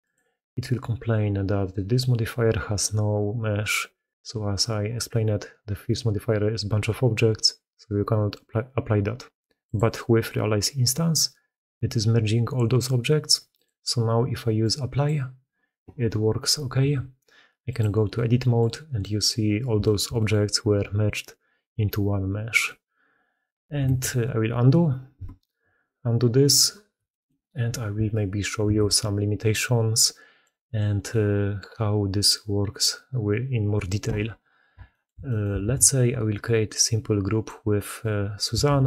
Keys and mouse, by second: 2.9-4.1 drag, 9.5 click, 13.4-14.9 drag, 16.7 Tab, 18.0-18.6 drag, 18.9 drag, 19.7 shift+drag, 19.8 shift+middle click, 20.0 middle click, 23.7 ctrl+z, 25.0 ctrl+z, 27.0 middle click, 28.5 ctrl+x, 35.5 shift+a, 38.6 shift+a.